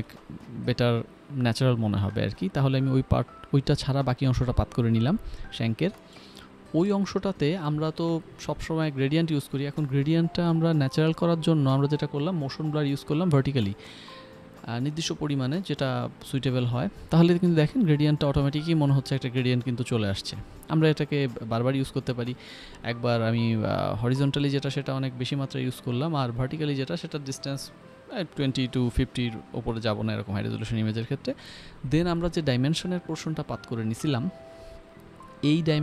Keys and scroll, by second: 0.4-1.3 typing, 2.9 ctrl+j, 15.6 Return, 17.8 ctrl+alt+f, 18.8 ctrl+z, 24.6-25.4 typing, 28.1 Return.